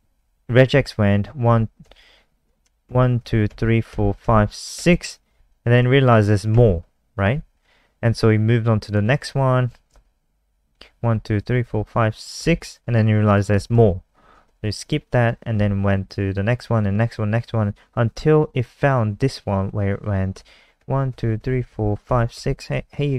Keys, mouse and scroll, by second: 0.0 Left, 0.2 Left, 0.2 Right, 1.4 Right, 1.8 Left, 2.8 shift+Right, 3.1 shift+Right, 3.4 shift+Right, 4.2 shift+Right, 4.7 shift+Right, 8.9 click, 10.0 Left, 10.1 Left, 10.3 Right, 10.5 Right, 11.1 shift+Right, 11.4 shift+Right, 11.6 shift+Right, 11.8 shift+Right, 12.3 shift+Right, 13.7 shift+Right, 14.4 Left, 14.7 Right, 14.9 Right, 15.5 Left, 15.8 Right, 20.7 shift+Right, 21.1 shift+Right, 21.3 shift+Right, 21.7 shift+Right, 22.0 shift+Right, 22.3 shift+Right.